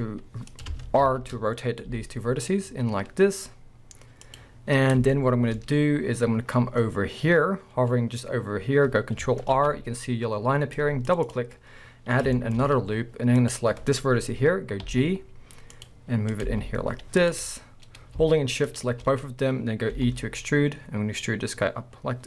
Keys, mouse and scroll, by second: 0.6 click, 1.0 ctrl+z, 1.9 r, 4.4 click, 5.1 shift+middle click, 9.5 ctrl+r, 11.4 click, 11.5 scroll down 1, 11.9 scroll up 1, 12.4 shift+middle drag, 12.6 scroll up 1, 13.4 click, 14.8 g, 16.3 click, 17.2 g, 17.3 click, 18.7 shift+click, 19.2-19.9 scroll down 1, 19.9 e.